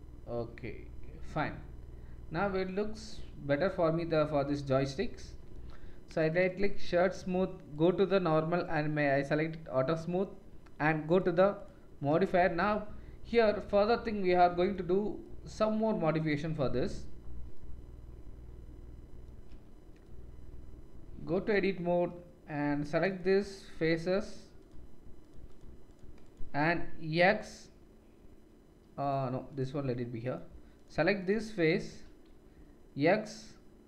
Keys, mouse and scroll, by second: 6.0-7.7 drag, 7.7 middle click, 7.8-8.6 drag, 8.6 middle click, 8.7-11.0 drag, 11.0 middle click, 11.6-14.0 drag, 18.5 click, 19.4 Tab, 22.6-24.0 drag, 23.6 shift+right click, 24.0-25.2 shift+scroll up 1, 25.2-25.8 shift+scroll up 1, 25.8-26.3 shift+scroll up 1, 25.9 shift+click, 26.3-33.8 shift+drag, 30.2 middle click, 30.2 right click, 30.7 shift+middle click, 30.7 shift+right click, 32.5 x.